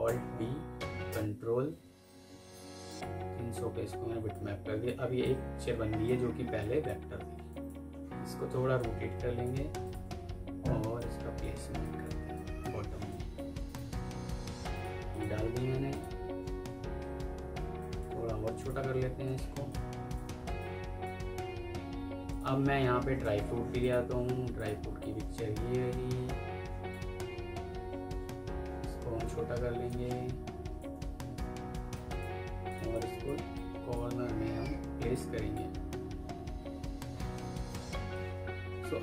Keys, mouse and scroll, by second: 1.0 Return, 6.2 F2, 13.6 right click, 15.0 double click, 17.4 F2, 18.5 alt+click, 22.7 alt+scroll up 1, 23.1 alt+Tab, 24.9 double click, 28.4 F4, 31.5 F2, 32.3 Escape, 32.8 double click.